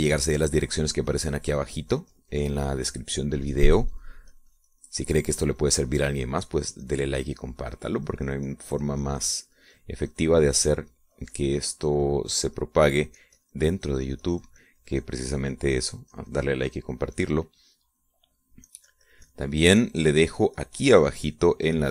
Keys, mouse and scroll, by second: 15.1-19.3 drag, 20.6-21.9 drag.